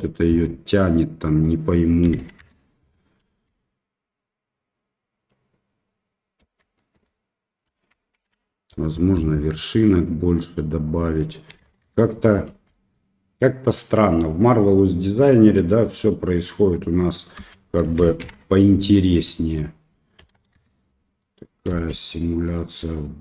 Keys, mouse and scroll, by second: 1.5-2.8 drag, 3.3 space, 6.5 space, 6.7 middle drag, 6.8 drag, 6.9 middle click, 8.2 shift+Left, 11.0-12.2 drag, 12.5 space, 13.1 click, 14.6 click, 14.8 middle click, 15.0 click, 17.4 space, 18.2 shift+Left, 19.5-20.9 drag, 21.2 middle drag, 21.7 space, 22.3 middle click.